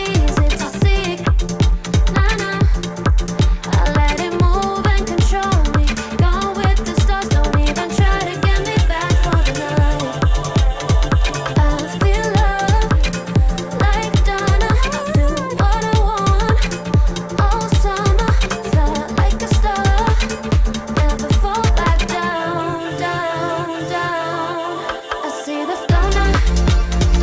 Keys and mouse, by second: 0.0 1, 0.7 shift+middle click, 2.0 j, 2.4 2, 2.7 click, 2.9 x, 3.9 Tab, 4.4-5.8 drag, 6.8 click, 7.6 click, 8.6-11.2 middle drag, 13.0-16.1 middle drag, 16.8 shift+click, 19.3 shift+click, 19.9 click, 20.3 Tab, 21.3 alt+click, 22.2-23.2 drag, 23.9 alt+click, 24.5-25.9 drag, 26.5 alt+click, 27.0 click.